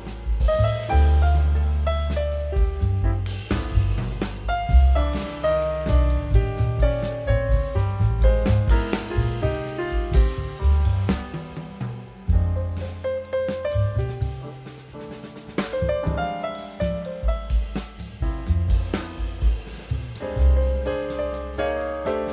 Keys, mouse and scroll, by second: 1.2 typing, 1.3 scroll down 1, 1.9 scroll up 1, 2.3 scroll down 1, 3.6 scroll up 1, 6.9 scroll down 1, 11.0 scroll up 1, 15.5 shift+scroll down 1, 20.3 shift+click.